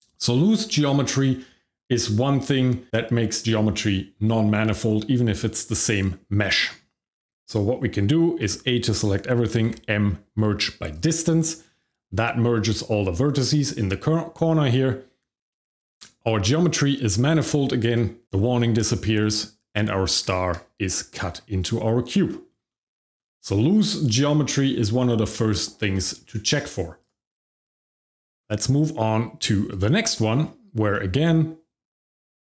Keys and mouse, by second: 6.6 right click, 8.4 a, 9.6 m, 19.2 shift+middle click, 20.2 Tab, 21.6 middle drag, 22.3 shift+middle click, 22.6 middle click, 22.9 shift+middle drag, 25.9 shift+middle click, 27.2 click, 28.3 g, 28.4 x, 29.7 click, 30.1 middle drag, 30.9-32.4 shift+middle drag.